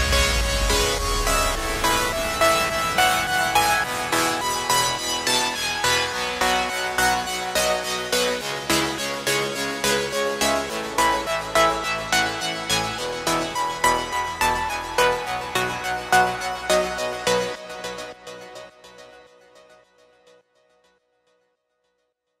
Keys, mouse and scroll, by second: 2.0 click, 2.4-4.0 scroll up 7, 4.0 click, 6.7 KP_1, 7.8-9.2 scroll down 1, 9.8-13.6 drag, 16.5 click, 17.1-17.5 scroll up 4, 17.5-19.8 shift+middle drag, 19.8 shift+click, 20.6-22.4 drag.